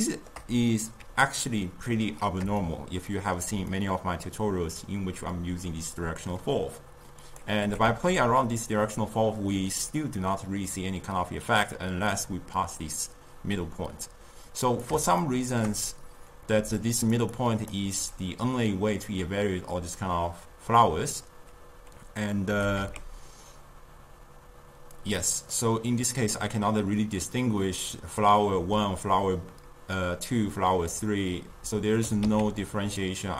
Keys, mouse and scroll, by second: 7.3 click, 7.7 g, 15.3-16.6 shift+middle drag, 16.6 d, 16.9 click, 17.2 d, 17.3 d, 17.4 click, 17.7 d, 22.5 g, 25.6-28.6 middle drag, 28.6-31.6 d, 32.1 g.